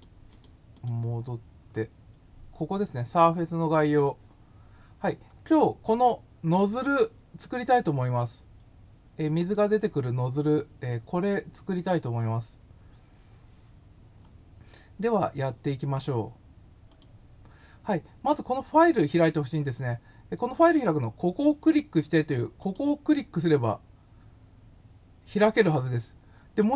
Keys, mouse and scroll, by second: 0.3 click, 0.7 click, 1.7-2.2 scroll up 2, 4.3 scroll down 1, 5.3 scroll up 2, 5.9 scroll down 2, 9.5 scroll up 1, 12.7 scroll down 1, 16.9 click, 22.6 click.